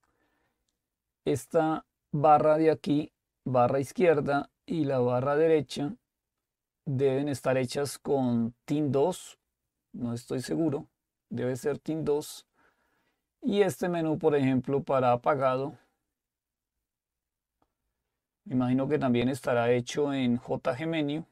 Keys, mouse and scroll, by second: 0.0 click, 15.5 click.